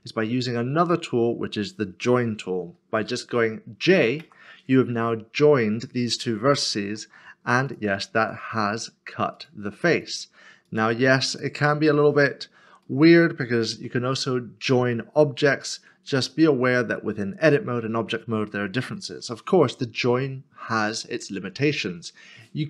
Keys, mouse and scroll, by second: 0.8 shift+click, 4.2 j, 6.8 3, 12.9 shift+middle click, 16.2 shift+middle click, 16.5-18.2 scroll down 1.